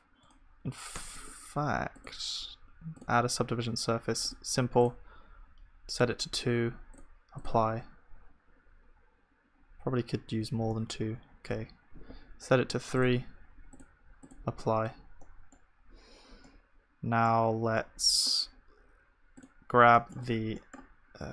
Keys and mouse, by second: 1.0 Tab, 1.0-4.4 middle drag, 1.0-4.4 right drag, 4.4-10.4 drag, 7.8 Tab, 10.4 Tab, 10.7 ctrl+z, 13.9-20.3 drag, 14.7 Tab, 20.3 Tab.